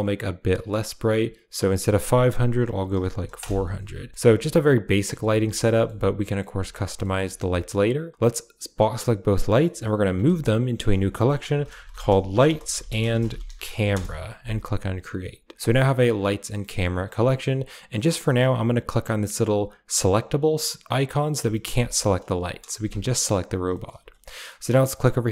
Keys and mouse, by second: 1.7-3.3 drag, 3.0 0, 4.2 a, 4.5-5.0 middle drag, 5.1 shift+middle click, 5.4 middle click, 5.6 shift+middle click, 6.1 middle click, 6.6 shift+middle drag, 6.9 middle click, 7.2 shift+middle click, 8.2-8.9 drag, 9.5 middle click, 10.1 m, 15.9 click, 16.6 click, 17.9 click, 20.2 click, 21.3 a, 21.6 g, 22.7 KP_Decimal, 23.6 middle click, 23.9 a.